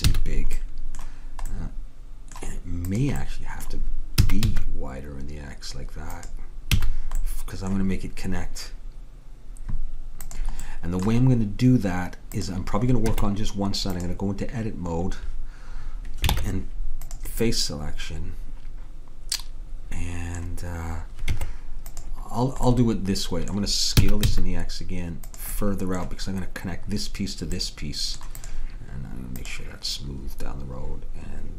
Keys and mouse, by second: 0.2 a, 2.9-4.7 drag, 4.3 s, 6.9 a, 10.7-12.5 middle drag, 12.5 click, 13.1 Tab, 16.4 ctrl+Tab, 21.4 Tab, 24.1 s, 28.5-31.5 drag.